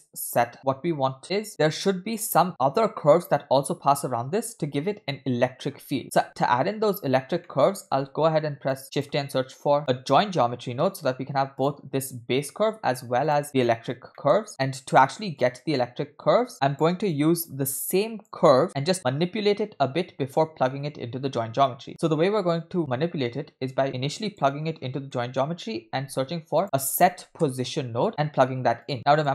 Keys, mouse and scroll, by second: 0.6 scroll down 1, 0.6 space, 1.2 scroll up 5, 1.5 space, 6.0 scroll down 2, 6.2 space, 7.4 middle click, 7.9 shift+a, 13.8-14.2 scroll down 2, 14.2 middle click, 14.6-15.0 drag, 15.4-16.8 drag, 16.8 middle click, 16.8 scroll down 4, 17.1-18.4 drag, 18.6-24.5 drag, 24.8-25.8 scroll up 5, 25.1 middle click, 25.8 shift+a, 28.9 click.